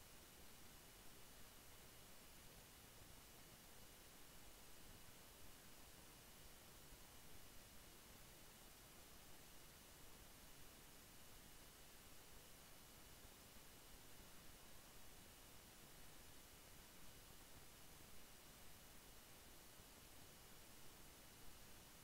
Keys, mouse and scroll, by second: 1.4 ctrl+r, 2.3-5.3 drag, 7.2 click, 7.9 ctrl+d, 12.2 right click, 13.7-21.1 drag.